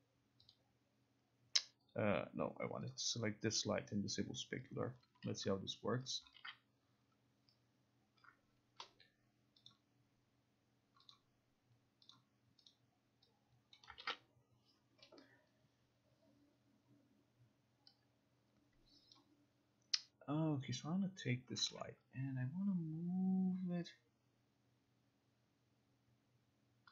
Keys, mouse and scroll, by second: 0.6 click, 1.2 click, 2.0 click, 3.0 click, 4.8 click, 6.2 click, 9.8 click, 11.2 click, 12.2 click, 12.8 click, 13.8 click, 19.2 click, 19.8 click, 20.7-21.8 drag, 21.8 e.